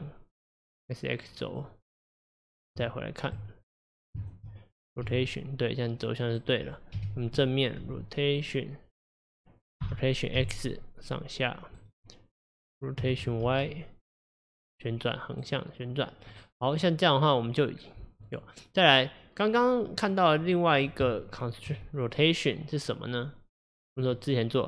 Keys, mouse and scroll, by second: 1.5 click, 2.5 click, 2.8 Tab, 3.9 click, 4.3 shift+click, 5.1 r, 7.0 KP_1, 7.9 r, 9.9 r, 16.1 scroll down 2, 16.4-17.2 middle drag, 17.2 scroll up 1, 17.8-18.3 scroll down 1, 18.3 click, 20.1 click, 20.5 click, 21.1 Tab, 22.0 click, 24.0-24.6 drag.